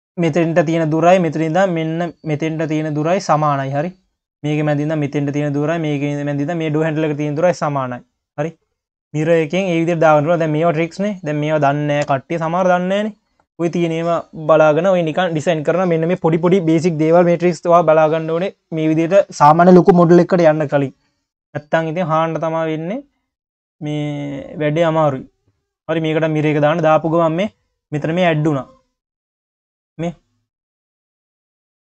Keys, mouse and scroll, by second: 1.8-2.2 scroll up 4, 3.2-6.6 drag, 6.7 scroll down 1, 7.9-9.1 drag, 9.3 q, 10.5-11.1 scroll up 2, 11.1 click, 12.0 KP_1, 21.7-24.8 drag, 26.6-27.3 scroll up 2, 28.1 scroll down 3, 28.4 q.